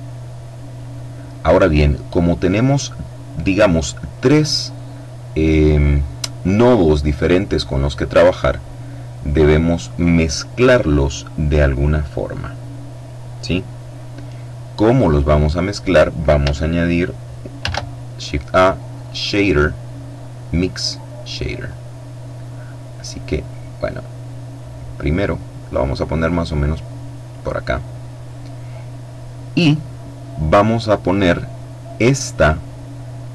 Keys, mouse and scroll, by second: 14.0-15.7 middle drag, 16.9 shift+a, 20.1 click, 21.0-27.1 drag, 26.9 middle click.